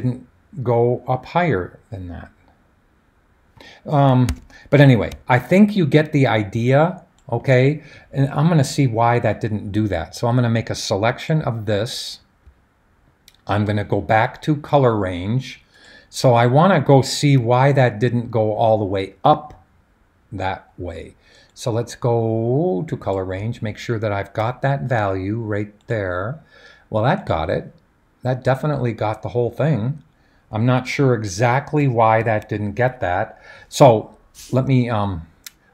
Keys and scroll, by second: 4.4 super+d, 32.2 super+h.